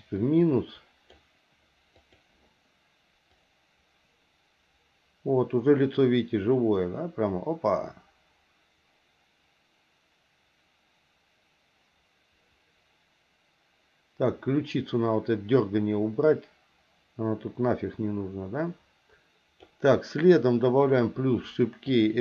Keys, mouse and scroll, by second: 0.2 click, 2.0 click, 3.4-19.7 drag, 20.7 click, 21.9 click, 22.1-22.2 drag.